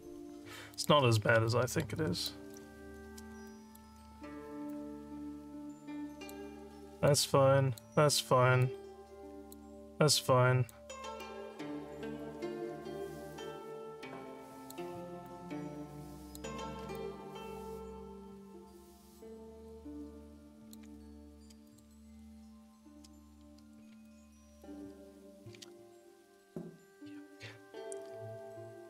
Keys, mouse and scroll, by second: 0.7 click, 1.5 alt+middle click, 2.3 alt+click, 3.5 alt+middle click, 4.7-6.3 drag, 7.1 click, 8.6 click, 10.7 click, 13.3-14.7 drag, 15.3-16.4 drag, 17.0-20.8 alt+drag, 21.6 click, 22.1 click, 24.0 alt+middle click.